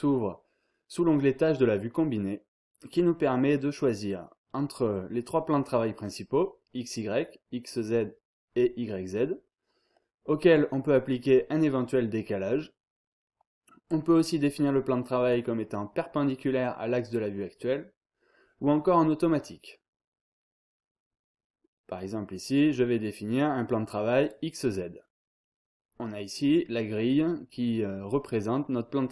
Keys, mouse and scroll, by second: 24.2 click.